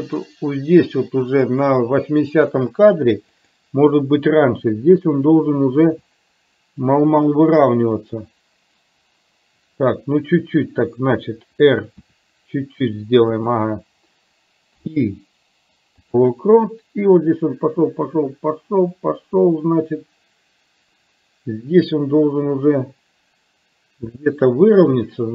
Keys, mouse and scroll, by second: 3.4 click, 5.9 r, 12.1 r, 14.8 i, 17.4-24.3 drag.